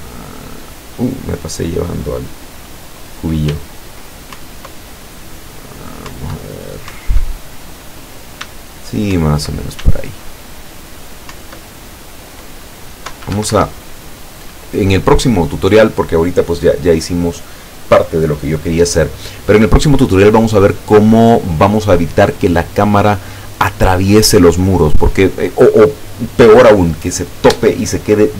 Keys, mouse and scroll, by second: 3.6 w, 4.4 Up, 6.2 Up, 7.0 Up, 8.5 s, 9.2 Up, 9.8 s, 11.4 Up, 13.2 Escape.